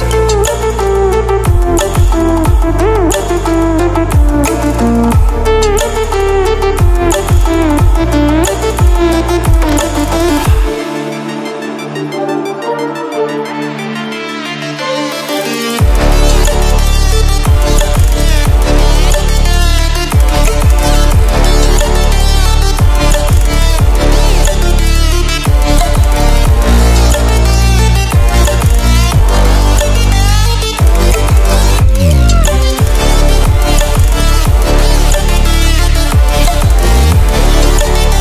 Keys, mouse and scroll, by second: 1.1-1.6 ctrl+alt+scroll down 2, 1.6 ctrl+alt+scroll up 2, 3.2-3.7 ctrl+alt+scroll up 2, 3.7-4.2 ctrl+alt+scroll down 2, 4.2 ctrl+alt+scroll up 2, 6.1-6.8 typing, 6.6-7.2 click, 12.9-13.6 typing, 13.1-18.7 drag, 21.4-22.1 scroll up 1, 23.7-29.6 drag, 32.5 ctrl+alt+scroll down 1, 33.2 ctrl+alt+scroll up 1, 33.8-34.1 ctrl+alt+scroll up 1, 36.3-38.2 drag.